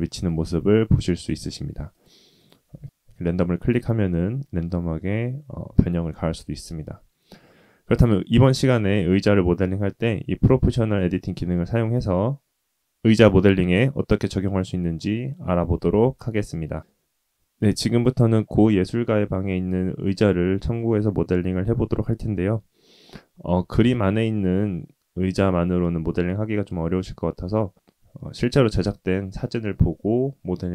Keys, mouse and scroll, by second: 1.2-2.2 drag, 2.3 click, 2.6 g, 5.6 middle click, 11.3-12.5 shift+middle drag.